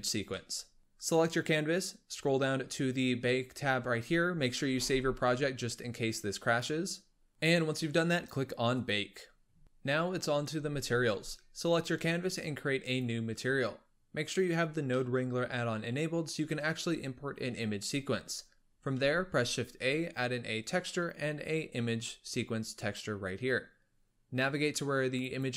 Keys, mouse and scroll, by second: 1.0-2.0 drag, 2.0-3.2 scroll down 12, 4.7 ctrl+s, 8.6-9.8 drag, 9.5-12.7 middle drag, 12.7-14.8 drag, 14.8-16.4 middle drag, 16.4-18.9 scroll up 1, 18.9 shift+a.